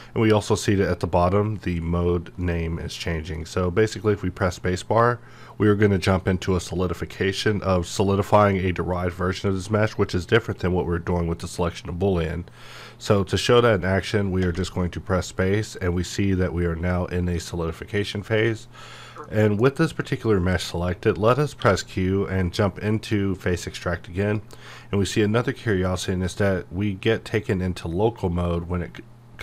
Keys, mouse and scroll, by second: 2.4-5.4 middle drag, 14.4 typing, 18.3 click, 19.2-21.6 middle drag, 21.6 q, 23.4-26.5 drag, 26.5-29.4 middle drag.